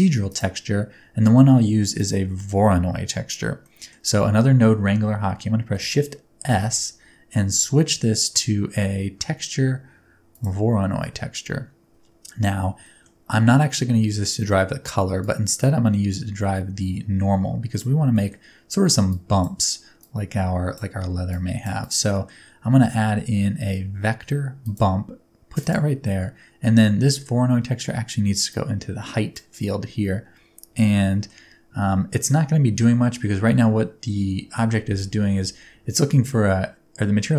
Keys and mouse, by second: 3.6 middle drag, 6.5 shift+s, 6.7-12.9 middle drag, 12.9 click, 12.9 right click, 13.0-15.2 middle drag, 15.2-17.8 drag, 17.8-18.1 middle drag, 18.1 click, 18.1 right click, 18.4-19.1 middle drag, 19.1 click, 19.4 middle click, 20.0 click, 20.7-21.3 middle drag, 21.3 click, 21.6-22.1 middle drag, 22.1 click, 22.1 right click, 22.8 shift+a, 28.5 click, 31.0 middle click.